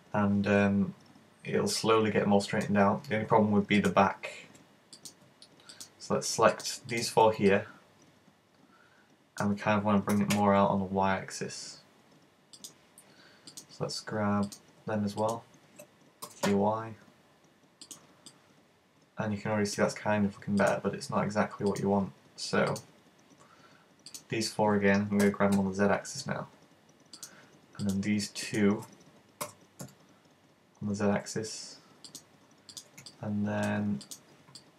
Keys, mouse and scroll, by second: 3.8 right click, 4.0 right click, 5.1 right click, 5.8 shift+right click, 6.6 right click, 6.9 shift+right click, 7.6 middle click, 10.2 g, 12.8 click, 13.6 right click, 14.5 right click, 15.3 shift+right click, 16.4 g, 18.0 click, 18.4 middle click, 20.7 right click, 21.8 shift+right click, 22.7 shift+right click, 24.2 shift+right click, 25.3 g, 27.2 click, 27.9 right click, 28.5 shift+right click, 29.5 g, 32.2 click, 32.8 right click, 34.6 middle click.